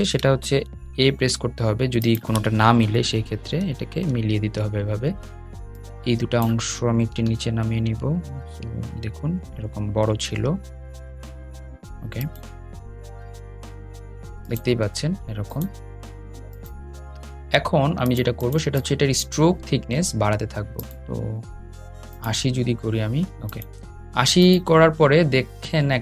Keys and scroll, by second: 2.0 a, 4.8 Up.